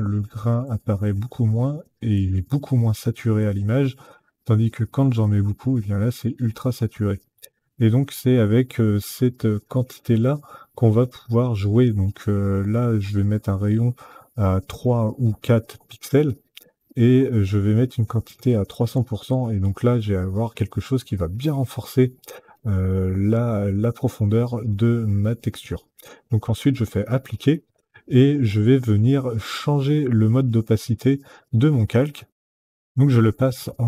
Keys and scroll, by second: 14.4 KP_3, 15.9 Tab, 18.0 KP_3, 18.3 KP_0, 18.7 Tab, 32.2 F9.